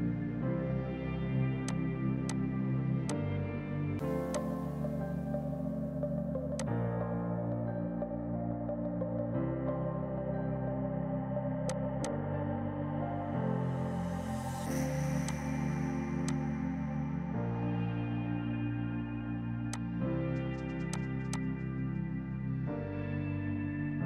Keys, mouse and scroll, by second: 1.0 click, 4.2 F2, 4.4 click, 4.6 right click, 6.7 click, 11.8 click, 14.4 typing, 15.4 click, 16.4 ctrl+click, 17.8 space, 18.6 right click, 19.8 click, 21.8 Return.